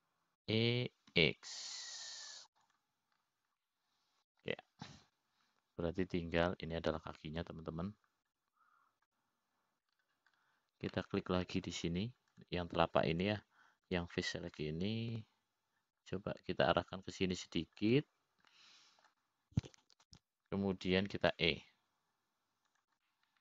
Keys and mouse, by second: 0.7 middle click, 2.9 e, 5.1 click, 6.1 middle click, 9.7 l, 10.8 click, 13.4 middle click, 14.9 click, 15.7 click, 16.3 click, 17.0-18.6 middle drag, 21.0 middle click.